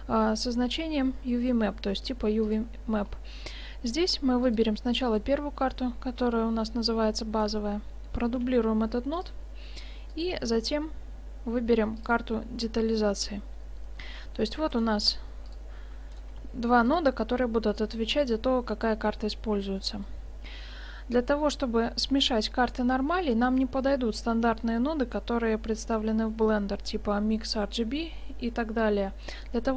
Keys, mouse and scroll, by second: 3.0-4.5 middle drag, 4.5-5.8 drag, 7.5-9.0 right drag, 8.5 shift+d, 9.0 click, 10.2-11.9 drag, 13.7-14.8 middle drag, 14.8-17.4 drag, 15.1 g, 16.4 g, 17.4-17.8 scroll down 1, 18.0-21.9 middle drag.